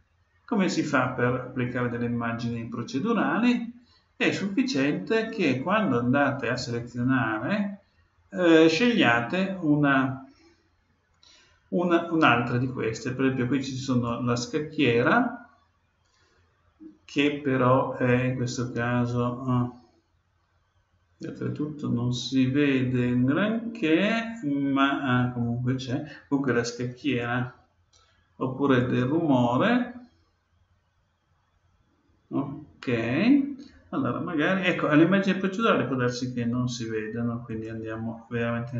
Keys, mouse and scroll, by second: 6.3-8.3 drag, 18.1-20.0 drag, 27.0-29.0 drag, 37.5-38.7 drag.